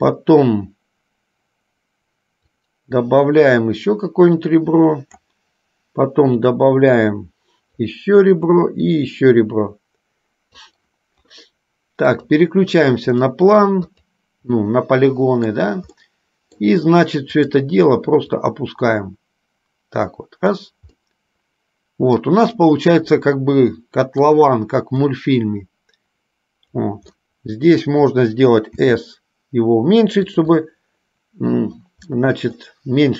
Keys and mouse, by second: 2.7-5.3 drag, 6.7-8.1 drag, 8.7-10.8 drag, 12.2 click, 13.2 click, 14.0 click, 14.8 middle click, 16.2 middle click, 18.5-20.7 drag, 21.2-22.5 middle drag, 24.0 middle click, 25.2 click, 25.5-27.0 drag, 27.3 middle click, 28.8 s, 30.8 middle click, 32.3 middle click.